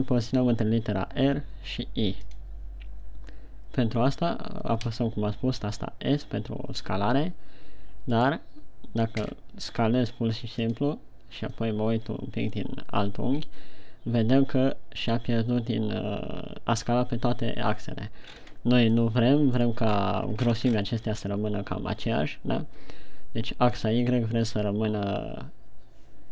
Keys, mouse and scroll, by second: 5.4 s, 8.8 right click, 9.9 s, 11.1 click, 12.1 middle click, 18.7-19.3 scroll up 5, 19.3 middle click, 20.1-20.6 scroll down 4, 21.1-21.4 scroll up 4.